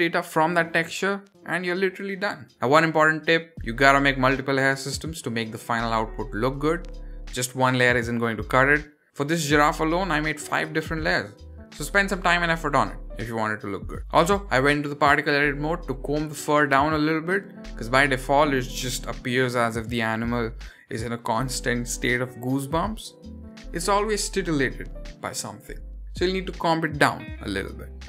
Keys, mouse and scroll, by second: 0.6 middle click, 2.5-9.1 middle drag, 9.1 scroll down 1, 9.4 click, 10.3 click, 11.5 click, 12.6 click, 14.0 middle click, 14.0 click, 14.0 scroll up 5, 14.8 click, 16.5 click, 17.7 click, 19.0 click, 20.2 click, 21.5 click, 23.0 click, 24.4 click, 26.4 drag, 27.9 click.